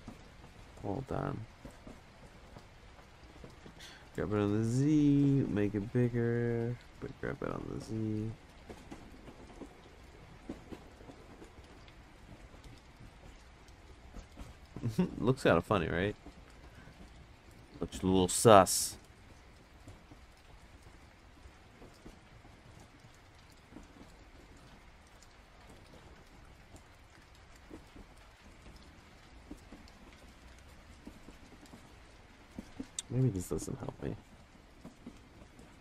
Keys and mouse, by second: 0.3-0.7 drag, 3.7 g, 5.4 s, 7.0 g, 8.6 s, 11.0 g, 12.5 r, 16.5 s, 19.7-20.3 drag, 20.7-21.9 drag, 23.3 ctrl+z, 24.5 click, 25.6 ctrl+z, 26.3 click, 27.7 ctrl+z, 27.9 click, 28.8 click, 30.5 ctrl+z, 31.8 ctrl+z, 34.2 click.